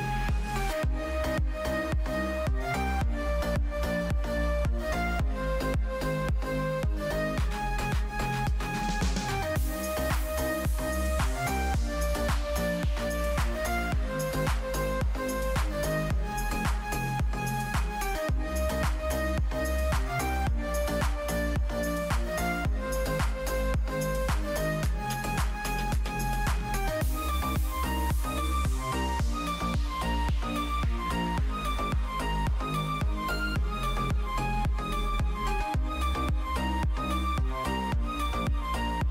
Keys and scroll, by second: 12.4 space, 28.5 space, 35.2 ctrl+z.